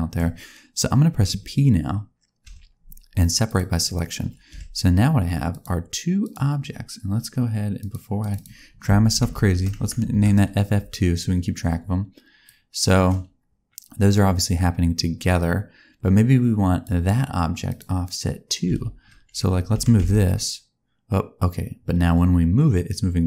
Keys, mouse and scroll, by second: 2.4 p, 4.4 Tab, 5.4 click, 6.1-8.3 click, 8.1 click, 9.2 shift+f, 12.4 click, 17.6 click, 18.6 a, 19.6 g.